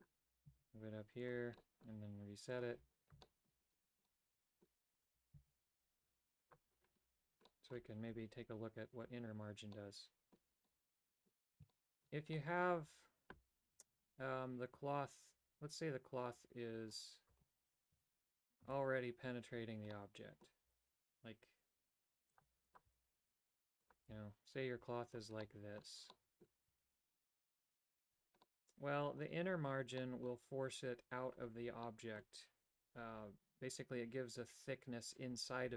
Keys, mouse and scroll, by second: 0.5 g, 1.7 middle click, 2.6 click, 3.3 shift+middle click, 4.2 middle click, 5.1 right click, 5.3 g, 7.6 middle click, 9.8 middle click, 10.7 middle click, 11.8 shift+middle click, 12.6 middle click, 17.1 right click, 17.5 Tab, 18.1 a, 18.9 a, 20.1 middle click, 20.8 g, 22.8 click, 23.2 r, 24.2 g, 25.7 middle click, 26.2 middle click, 26.9 a, 28.6 middle click, 30.1 middle click, 32.0 middle click.